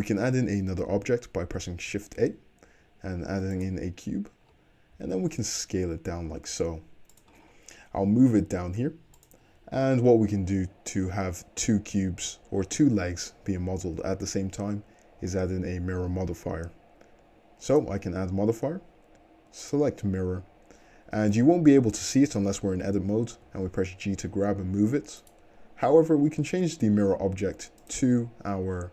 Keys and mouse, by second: 2.2 shift+a, 5.0 s, 5.2-17.7 middle drag, 8.0 g, 17.7-28.9 drag, 22.6 Tab, 23.4 g, 25.9 Tab.